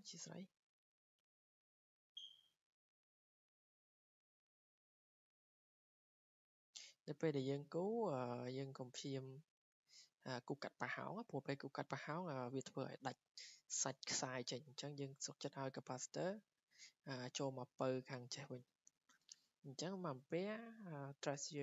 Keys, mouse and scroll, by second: 0.4 click, 1.3 click, 5.7 click, 7.3 click, 8.4 click, 10.5 click, 11.7-15.6 drag, 15.7-16.9 drag.